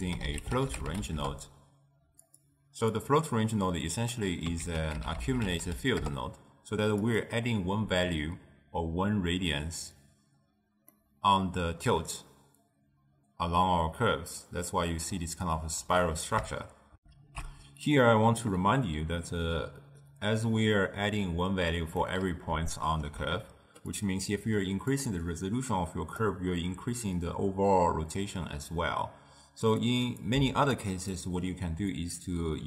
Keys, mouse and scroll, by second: 1.3 ctrl+a, 4.2-6.1 drag, 6.1 c, 11.0-16.0 middle drag, 16.0-16.9 scroll up 1, 17.1 ctrl+alt+shift+q, 22.1-24.0 middle drag, 24.0 click, 25.1-28.2 drag, 30.0 click, 30.4 x, 30.9 click, 32.0-32.6 drag.